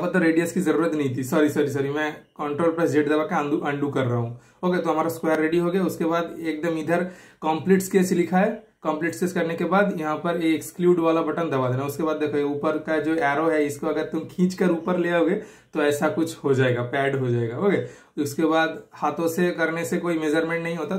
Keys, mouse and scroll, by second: 3.6 super+click, 4.2 typing, 6.8 super+click, 6.9 shift+super+middle click, 11.9 super+click, 15.2 shift+super+middle click, 17.8 super+click.